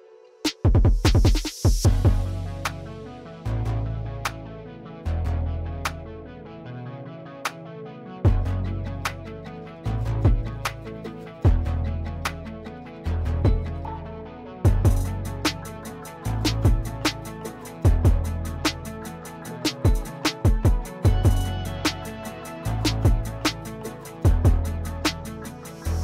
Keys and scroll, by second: 0.1 t, 6.3 Escape, 15.0 F3, 16.2 x, 18.2 l, 21.1 \, 24.9 l.